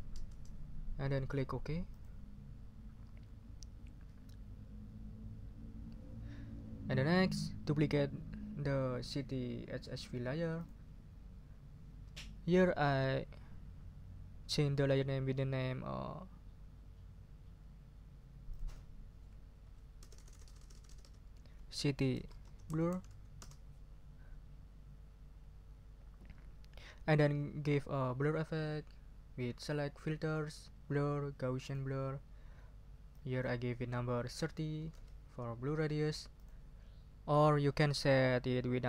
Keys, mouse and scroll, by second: 0.3 Return, 1.9 click, 10.6 click, 18.5 click, 19.6 Right, 20.0 BackSpace, 21.9-23.4 typing, 29.6 click, 31.6 click, 33.1 click, 34.5-35.4 typing, 36.3 click.